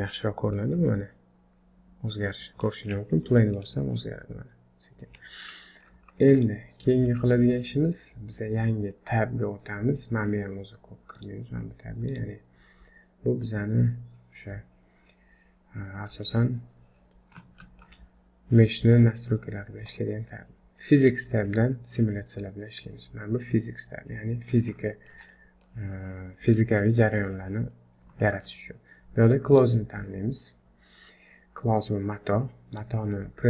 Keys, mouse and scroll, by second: 0.5 click, 5.0 Escape, 5.6 middle click, 6.0 z, 6.7-7.1 scroll down 3, 7.1 middle click, 11.1 click, 12.1 click, 17.6 shift+middle click, 21.0 click, 24.6 scroll down 2, 24.9 shift+middle click, 25.3 middle click, 27.7-28.1 scroll up 3, 28.2 shift+middle click, 29.5 click, 31.3-31.7 scroll down 1, 31.7-32.6 scroll up 1, 32.7 click.